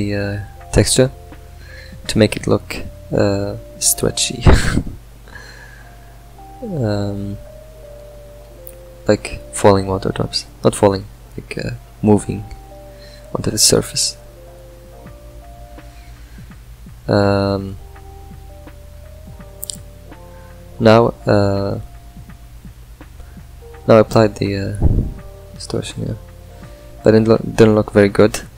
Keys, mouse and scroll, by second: 7.8 ctrl+right click, 10.4 click, 10.7-11.8 middle drag, 11.8 scroll down 3, 21.1 click, 23.2-26.1 drag.